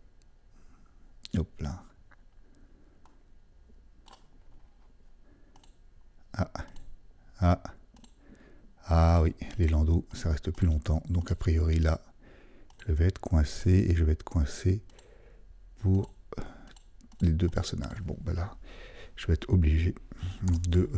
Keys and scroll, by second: 20.5 super+d.